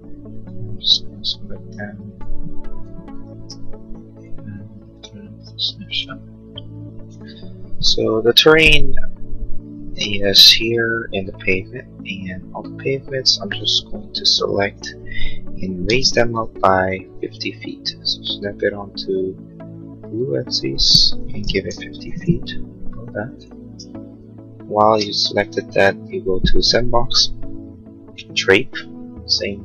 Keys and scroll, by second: 16.0 m, 21.4 5, 21.8 0, 22.3 Return, 24.8 space.